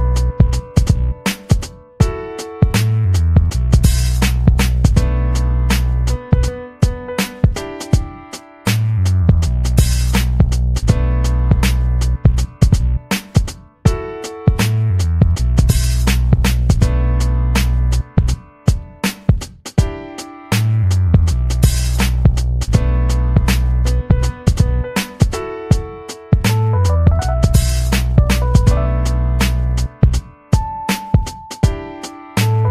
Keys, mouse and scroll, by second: 0.5-1.4 ctrl+scroll up 2, 1.6-2.0 ctrl+scroll up 2, 2.2-2.6 ctrl+scroll up 2, 2.8-3.1 ctrl+scroll up 2, 3.8-4.6 ctrl+scroll up 4, 4.8-5.2 ctrl+scroll up 2, 7.3 ctrl+scroll up 2, 8.0-8.8 ctrl+scroll up 4, 9.3-10.1 ctrl+scroll up 2, 10.2-10.9 ctrl+scroll up 4, 11.2 ctrl+scroll up 2, 11.9 ctrl+scroll up 2, 13.5 ctrl+scroll up 2, 14.3-16.4 drag, 16.6-18.0 drag, 18.7 ctrl+scroll up 2, 19.9 ctrl+scroll up 2, 21.4-23.0 drag, 23.1 ctrl+scroll up 2, 24.2 ctrl+scroll up 2, 28.0 click, 31.0 ;, 31.7 BackSpace.